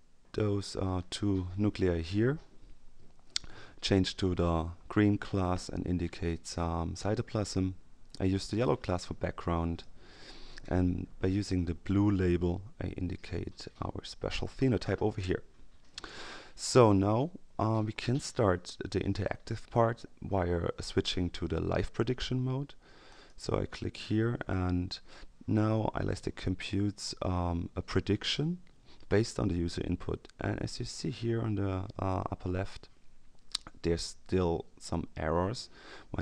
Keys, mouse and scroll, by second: 4.1 click, 6.5-7.6 drag, 8.3 click, 9.3-10.2 drag, 11.2 click, 13.1-14.7 drag, 23.1 click.